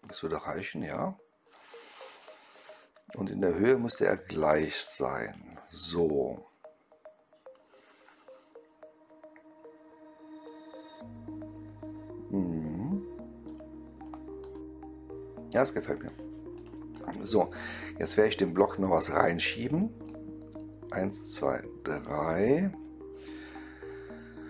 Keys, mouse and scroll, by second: 1.4-2.1 right drag, 3.3-5.2 drag, 5.9-13.3 right drag, 14.3 click, 14.7-15.7 right drag, 16.5 click, 16.8 click, 17.5 right click, 18.6 click, 20.0-22.7 drag, 23.9-24.4 right drag.